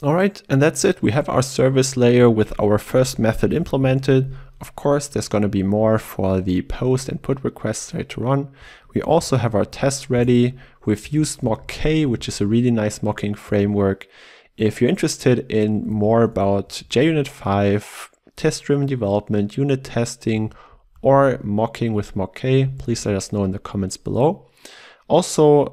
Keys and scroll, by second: 9.3 ctrl+e.